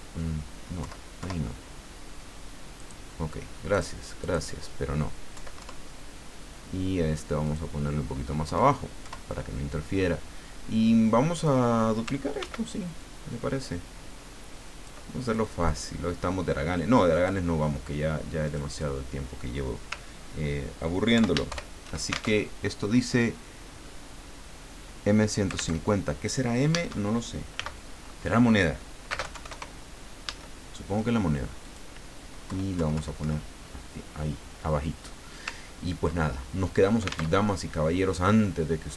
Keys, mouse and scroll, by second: 0.8 Left, 2.8 click, 3.7 click, 4.2 click, 5.3 Left, 7.4 click, 8.4 Left, 11.3 click, 12.4 ctrl+d, 13.0-15.1 ctrl+drag, 15.2 ctrl+click, 17.1 click, 18.4 click, 21.1 ctrl+End, 21.5 ctrl+shift+Home, 22.4 ctrl+alt+shift+Tab, 25.8 alt+Tab, 27.5 m, 29.1 space, 29.2 KP_1, 29.3 KP_5, 29.5 KP_0, 31.6 click, 32.4 BackSpace, 35.5-36.0 ctrl+scroll down 2, 36.2 ctrl+click, 37.4 alt+Tab, 38.1-38.9 scroll down 4.